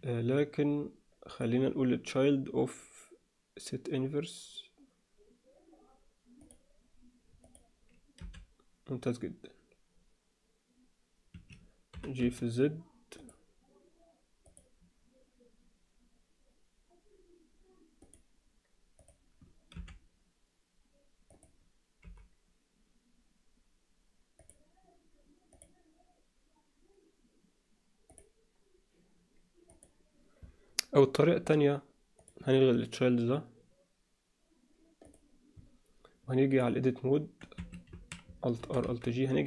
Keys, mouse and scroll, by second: 1.3 click, 7.4 click, 8.2 r, 11.9 g, 18.0 click, 19.0 click, 19.7 r, 22.0 g, 25.5 click, 29.7 click, 32.2 click, 35.0 click, 36.6-37.6 drag, 37.9 a, 38.6 alt+r, 38.8 alt+g.